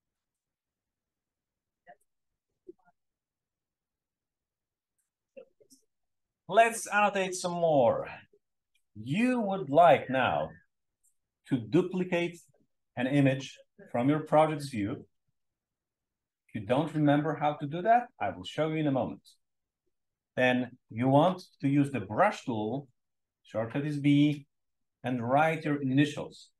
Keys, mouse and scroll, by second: 1.0 s.